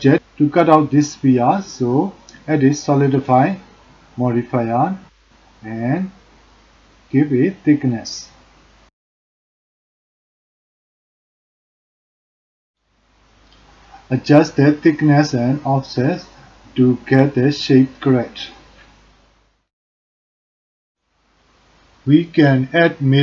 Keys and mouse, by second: 2.2-5.5 drag, 6.4 middle click, 10.9-13.8 drag, 14.9-17.5 drag, 18.0 click, 19.5 click, 20.8 middle click.